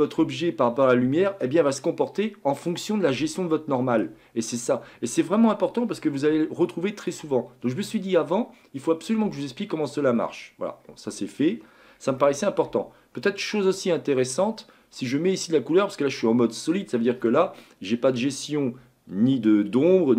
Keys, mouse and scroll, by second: 3.4-9.5 middle drag, 10.2-10.7 scroll down 2, 10.7-11.4 scroll up 1, 11.4-12.2 scroll down 2, 12.2-15.2 shift+middle drag.